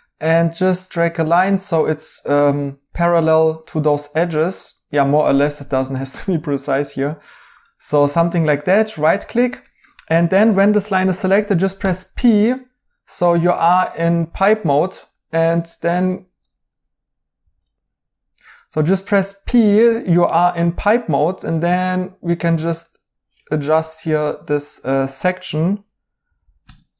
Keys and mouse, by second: 8.5 right click, 17.3 ctrl+z, 18.7 p, 23.3-24.5 typing, 25.9-26.7 typing.